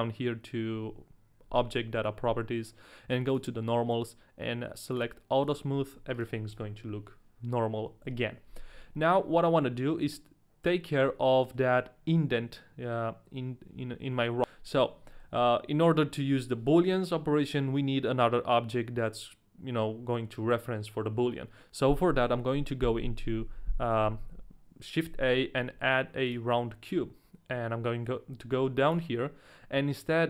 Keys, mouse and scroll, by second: 3.3 click, 4.9 click, 5.4 click, 6.1 right click, 6.5 ctrl+a, 6.5 click, 6.5 right click, 8.0 KP_1, 9.0 middle click, 9.8-10.5 scroll down 1, 11.3 middle click, 14.4 right click, 14.4 middle click, 14.4 scroll up 1, 14.8 scroll down 1, 15.3 shift+middle click, 15.3 scroll down 1, 15.7 middle click, 22.4 shift+a, 29.0 click.